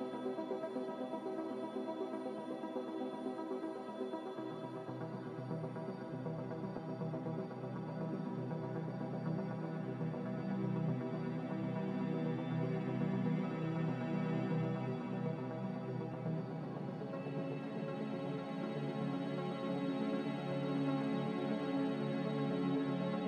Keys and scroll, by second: 1.9 Delete, 4.5 Delete, 8.8 m.